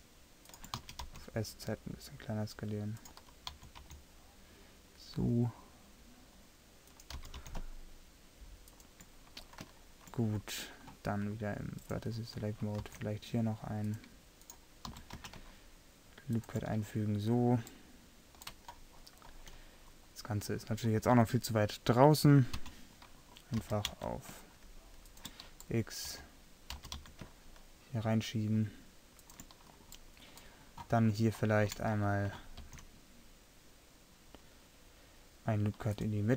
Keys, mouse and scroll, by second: 0.8 s, 3.6 s, 7.3 g, 11.8-12.9 drag, 12.9 ctrl+r, 14.9 s, 20.0-22.6 middle drag, 22.6 l, 23.7 g, 26.1 z, 26.8 g, 32.0 middle click, 32.7 ctrl+r.